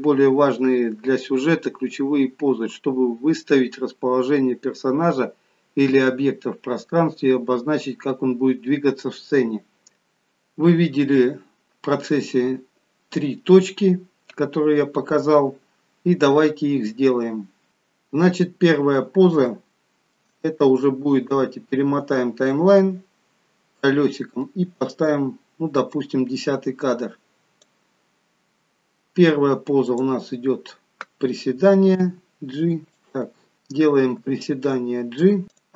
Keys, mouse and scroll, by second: 18.2-19.3 scroll up 2, 19.4 shift+middle click, 21.3-23.2 scroll up 9, 22.5 middle click, 26.0 click, 29.9 click, 32.1 g, 33.6 click, 33.6-34.0 scroll down 3, 34.2 g.